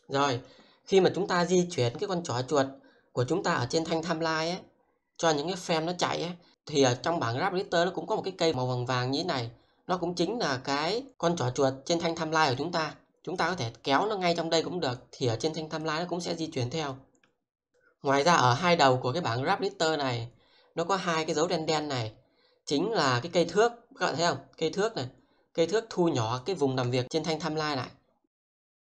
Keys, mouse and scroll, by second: 1.4-28.8 drag.